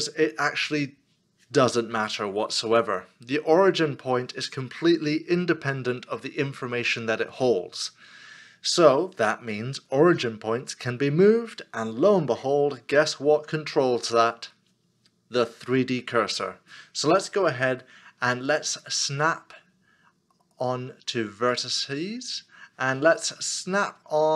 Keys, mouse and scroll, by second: 24.2 ctrl+right click.